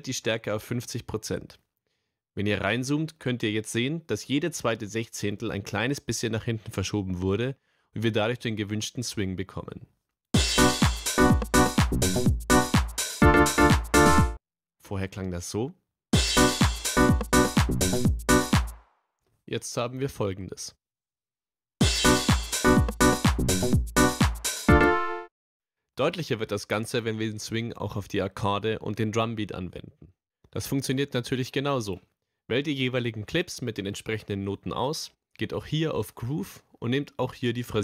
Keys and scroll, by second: 10.3 space, 14.2 space, 16.1 space, 18.7 space, 19.8 super+y, 21.7 space, 24.8 space.